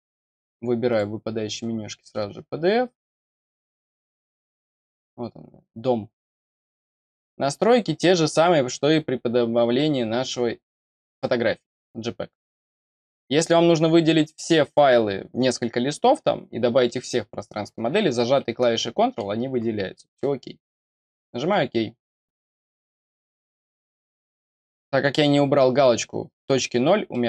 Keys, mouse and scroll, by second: 0.8 click, 3.3 click, 4.6 click, 4.8 click, 13.3 click, 21.0 click, 22.5-22.9 scroll down 1, 23.4-23.9 scroll up 1, 23.9-25.0 scroll down 1, 25.0-26.7 scroll up 1, 26.7-27.0 scroll up 1, 27.0 middle click.